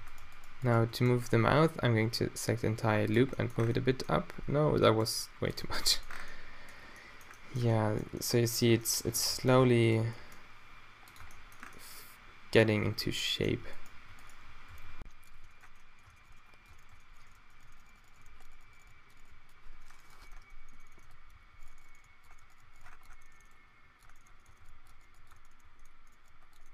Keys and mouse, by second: 1.6 g, 3.2 Tab, 4.6 Tab, 4.8 g, 5.7 Tab, 8.7 Tab, 9.1 Tab, 9.6 Tab, 10.1 g, 11.2 Tab, 11.3-11.9 middle drag, 12.8 Tab, 14.7 ctrl+e, 15.3 q, 15.4 Tab, 16.0 Tab, 16.2 g, 16.6 Tab, 16.9 Tab, 17.6-19.3 typing, 20.4 Tab, 20.9 Tab, 21.0-22.7 typing, 21.6-22.2 drag, 22.2 Tab, 22.3 Tab, 22.7 click, 23.0 Tab, 23.6 Tab, 23.8 g, 23.9 drag, 24.1 Tab, 24.2 Tab, 24.5 Tab, 24.5 Tab, 24.6 g, 24.8 click, 24.8 Tab, 25.0 Tab, 25.1 g, 25.3 Tab, 25.6 Tab, 26.2-26.7 typing, 26.5 drag.